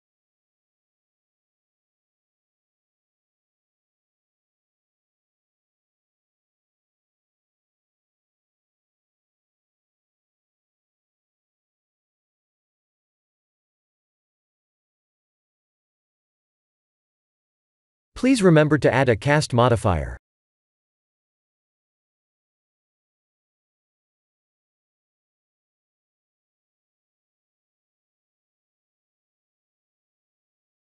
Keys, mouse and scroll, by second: 0.8-1.6 scroll up 6, 1.7 shift+middle click, 3.2 click, 4.2 s, 6.6 middle click, 7.1 shift+z, 7.4-8.2 scroll down 7, 8.2-9.3 scroll up 4, 9.3 right click, 10.6 ctrl+3, 11.2 click, 12.7 click, 13.1 click, 14.9 middle click, 16.0 click, 20.0 click, 22.2 click, 22.9 middle click, 26.7 click, 27.8 s.